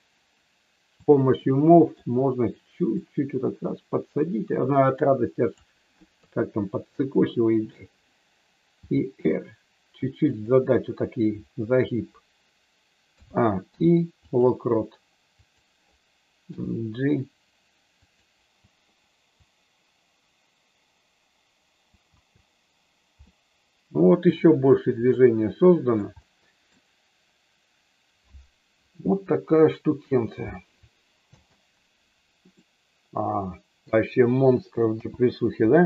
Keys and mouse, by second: 1.0 click, 1.4 middle click, 3.0-5.6 drag, 6.1 KP_3, 8.6 r, 10.2 click, 13.1 a, 13.6 i, 15.4 click, 16.5 g, 18.0 click, 19.4-21.9 drag, 22.0 space, 23.2-24.2 middle drag, 25.1 shift+middle click, 26.2 middle click, 31.3 space, 32.5-33.9 middle drag, 34.9 n.